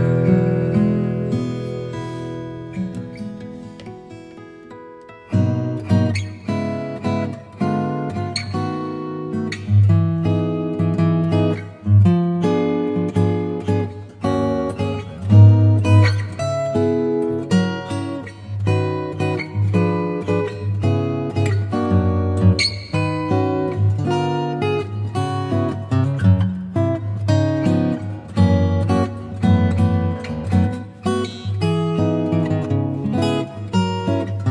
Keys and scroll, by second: 2.6 super+i, 3.9 b, 5.7 0, 6.5 [, 10.7 [, 13.7 space, 16.1 space, 17.2 ], 18.4 [, 20.1-23.3 typing, 24.8 space, 25.2 2, 26.6 space, 27.2 0, 27.8 [, 29.6 space, 30.5 space, 32.0 [, 33.1 space.